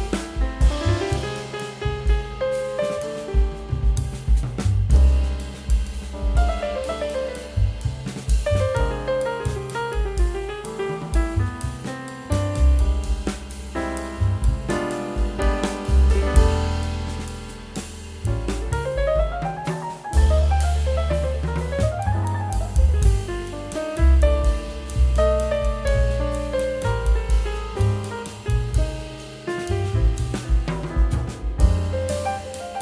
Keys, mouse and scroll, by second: 4.8 space, 7.1 double click, 10.5 shift+click, 10.9 right click, 14.1 right click, 16.1 double click, 18.0 e, 18.4 right click, 28.8 ctrl+l.